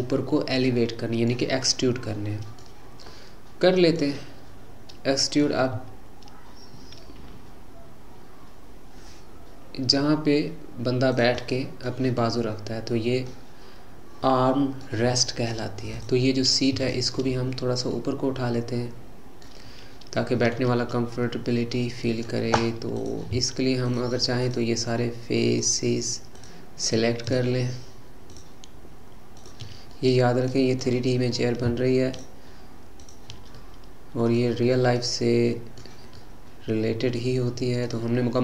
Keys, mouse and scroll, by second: 5.8 e, 11.4-16.0 middle drag, 16.0 click, 16.8 shift+click, 18.0-23.0 middle drag, 23.0 click, 23.9 shift+click, 24.4 shift+click, 25.5 shift+click, 26.3 shift+click, 26.9 shift+click, 27.3 shift+click, 28.3 shift+click, 29.4 shift+click, 30.0-32.1 middle drag, 32.1 shift+click, 33.0 shift+click, 33.6-38.4 middle drag.